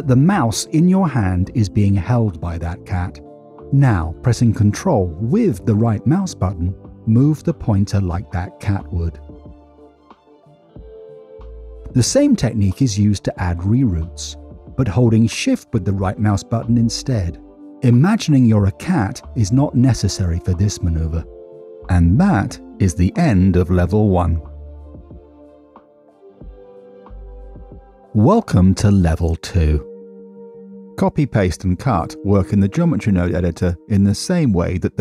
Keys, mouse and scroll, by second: 4.5 ctrl+z, 5.5 ctrl+right click, 13.4 middle click, 17.3 shift+right click, 21.8 middle click, 22.8 middle click, 23.1 scroll up 1, 27.6-29.3 drag, 30.3 middle click, 30.3 scroll down 1, 30.4 scroll up 1, 31.2 middle click, 33.2 click, 33.4 ctrl+c.